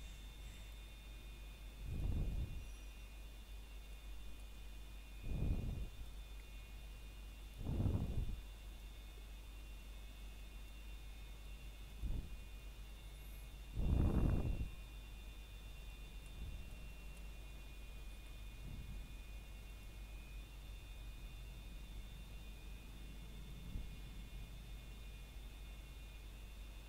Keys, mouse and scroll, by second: 0.9 click, 3.3 middle click, 3.8-4.1 scroll down 1, 4.1 middle click, 4.7 scroll up 1, 5.1 middle click, 5.9-6.4 scroll up 1, 6.4 middle click, 7.1 shift+middle click, 7.9 shift+middle click, 9.0 s, 10.7 click, 11.0-11.3 scroll down 1, 11.3 middle click, 13.7-14.2 scroll up 1, 14.2 middle click, 15.8 click, 18.4-18.7 scroll down 1, 18.7 middle click, 19.2 click, 19.7 middle click, 20.8-21.2 scroll up 1, 21.2 middle click.